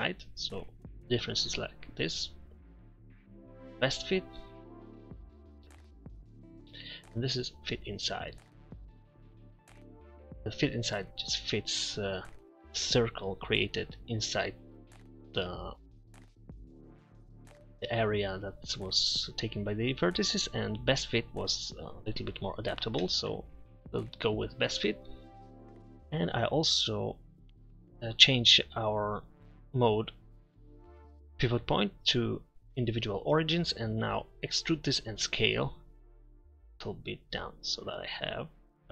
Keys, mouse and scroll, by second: 2.3-4.2 drag, 5.6 ctrl+z, 6.6 ctrl+KP_Subtract, 23.3 ctrl+z, 34.8 e.